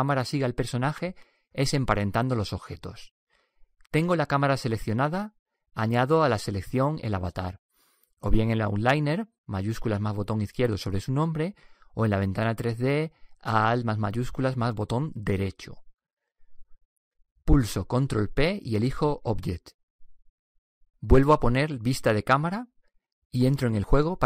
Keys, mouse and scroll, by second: 1.0 KP_0, 14.9-16.7 right drag, 18.7 ctrl+p, 22.4 KP_0.